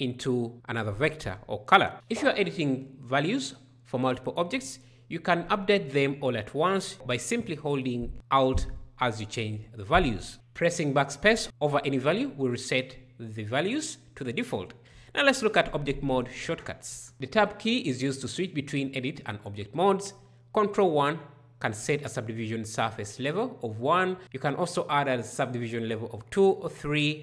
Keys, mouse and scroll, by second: 10.9 BackSpace, 17.4 Tab.